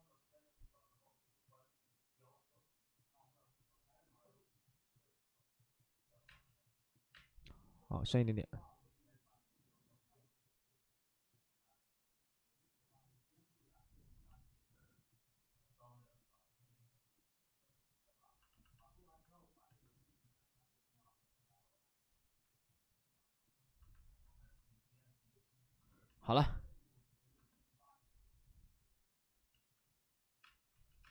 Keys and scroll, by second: 6.2-7.6 typing, 29.5 ctrl+z, 30.4 space, 30.7 ctrl+z, 31.0 space.